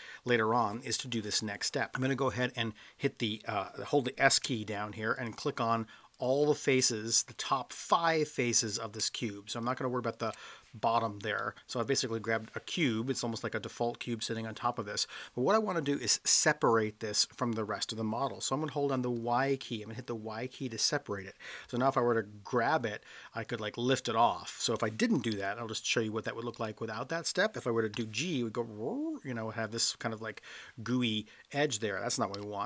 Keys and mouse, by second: 5.2 shift+click, 7.1-8.8 middle drag, 10.2 shift+click, 11.4-12.8 middle drag, 19.2 y, 21.6 g, 25.4 ctrl+z, 26.6 ctrl+z, 27.9 g, 31.7 click, 32.4 ctrl+z.